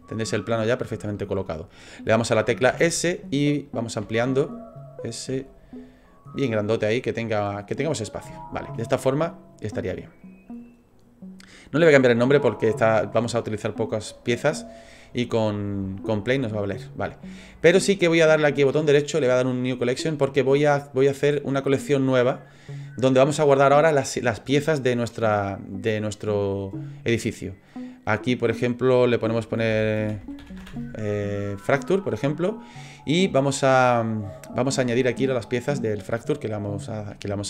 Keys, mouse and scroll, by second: 0.5 middle click, 1.0 shift+middle click, 2.7 s, 4.0 s, 6.3-7.1 scroll down 5, 6.6 middle click, 7.6-8.4 scroll up 6, 8.4 shift+middle click, 8.8 middle click, 10.2 right click, 18.4 right click, 27.7 click, 27.9 click.